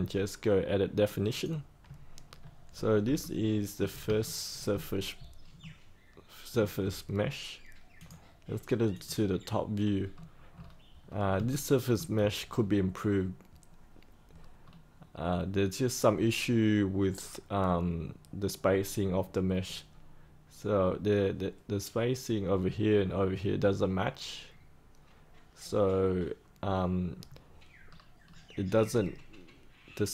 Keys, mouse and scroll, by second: 1.3 click, 2.7-3.0 scroll up 1, 3.1 alt+middle click, 4.2 shift+middle click, 5.6 alt+middle click, 7.9-10.0 drag, 10.1-10.6 scroll down 1, 11.4 shift+middle click, 12.4-12.9 scroll down 1, 12.9 scroll up 1, 14.6-19.4 scroll down 1, 27.8-28.2 scroll up 1, 28.2-30.0 scroll down 1, 30.0-30.1 scroll up 1.